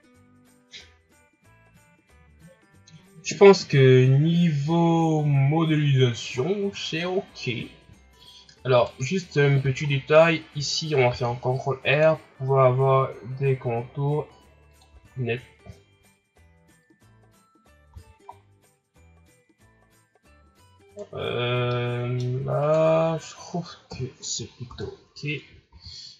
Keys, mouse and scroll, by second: 6.4 scroll down 2, 7.9 shift+scroll down 4, 8.2 scroll up 2, 8.8 right click, 9.3 scroll down 2, 9.6 Tab, 9.9-11.0 scroll up 1, 11.0 ctrl+r, 14.9 Tab, 15.2-15.7 scroll down 2, 15.7-17.9 shift+scroll up 4, 17.9 a, 18.3-19.2 scroll down 1, 19.6-20.5 scroll up 2, 20.5 scroll up 2, 20.9 right click, 21.4 scroll down 1, 21.7-22.6 middle drag, 22.6 shift+right click, 23.4-23.8 scroll down 1, 23.8 KP_1, 24.4 scroll up 4, 24.7 Tab, 25.5 a, 25.7 a.